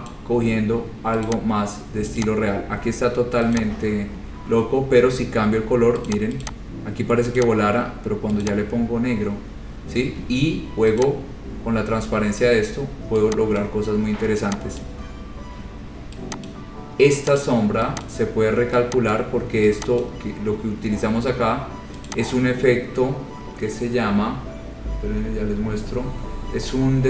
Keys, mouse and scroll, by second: 0.3 click, 0.6-1.2 scroll, 1.5 click, 2.4 click, 3.8 click, 4.5-4.9 scroll, 6.3 click, 6.7 click, 7.6 click, 8.6 click, 9.2-10.0 scroll, 11.3 click, 13.8 click, 15.0 click, 16.7 click, 17.6 click, 18.3 click, 19.3 click, 20.2 click, 22.3 click, 26.2 click.